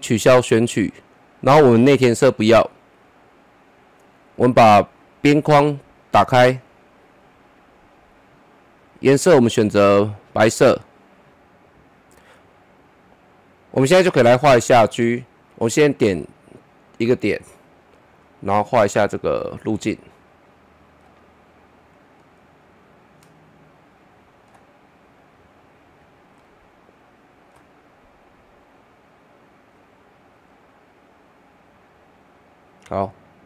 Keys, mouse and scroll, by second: 15.7 click, 21.1-30.3 drag.